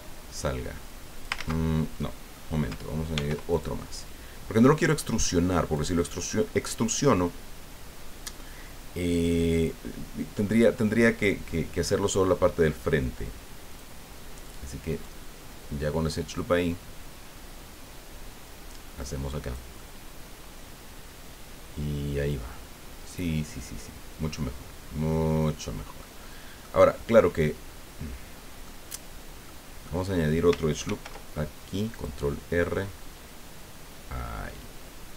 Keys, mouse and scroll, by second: 1.3 ctrl+z, 2.0 middle click, 3.1 ctrl+r, 3.5 ctrl+click, 5.7 click, 13.7 click, 14.9 right click, 16.4-19.7 drag, 26.2 middle click, 27.2-28.8 middle drag, 29.4 middle click, 30.8 ctrl+r, 31.9 click.